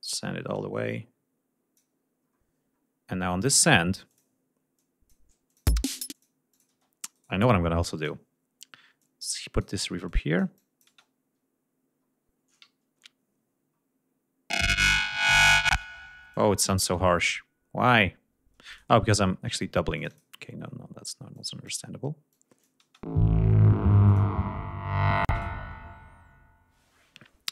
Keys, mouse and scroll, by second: 2.3-3.0 scroll down 4, 3.5 scroll up 2, 4.1 click, 4.8 click, 5.5 click, 5.8 space, 6.2 click, 6.6 click, 6.8 space, 7.2 right click, 8.0 click, 9.1 click, 10.1 click, 11.0 space, 12.1 scroll up 2, 12.9 ctrl+scroll down 2, 13.1 ctrl+scroll up 2, 13.8 scroll up 2, 14.6 click, 15.7 space, 16.4 click, 16.9 space, 17.7 scroll down 2, 18.7 ctrl+space, 18.8 ctrl+click, 20.0 click, 21.4-21.9 drag, 22.4-22.9 drag, 22.9 space, 24.1 click.